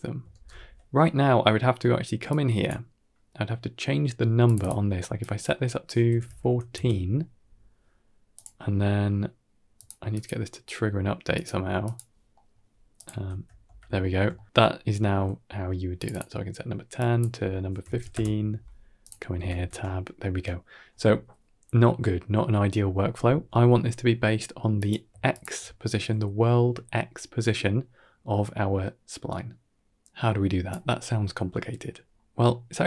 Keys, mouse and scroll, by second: 0.2 ctrl+space, 2.1-2.5 drag, 4.3 click, 4.5-6.6 drag, 8.2 click, 9.6 click, 10.0 click, 11.2 click, 11.7 click, 12.2 middle click, 12.8 click, 13.1 Tab, 13.5 Tab, 14.2 shift+middle drag, 14.5-15.0 scroll up 1, 15.8 click, 16.0-18.0 drag, 18.9 click, 19.2 Tab, 19.5 Tab, 24.6 click, 25.2 shift+click, 30.0 click, 31.4 middle click, 31.9 scroll down 2, 32.2 middle click, 32.6 middle click.